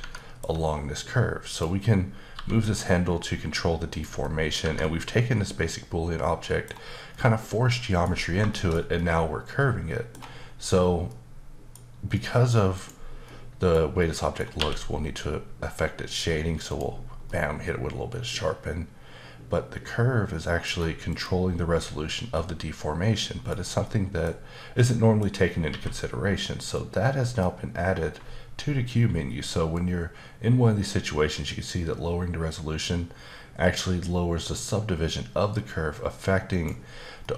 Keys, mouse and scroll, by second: 0.0 Tab, 0.1 middle click, 1.5 click, 2.3 g, 3.9 click, 4.2 middle click, 4.6 Tab, 4.8 middle click, 7.1 middle click, 8.2 scroll up 1, 8.5 shift+middle click, 11.1 middle click, 12.1 middle click, 12.7 click, 13.2 middle click, 14.0 middle click, 14.6 q, 16.7 click, 17.3 middle click, 21.1 click, 22.3 middle click, 23.8 middle click, 24.8 middle click, 25.7 q, 29.7 click, 37.2 middle click.